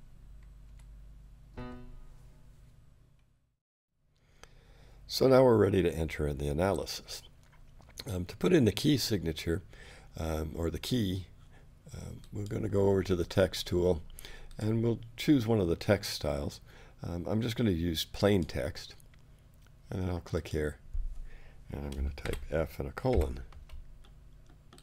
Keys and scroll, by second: 0.7 6.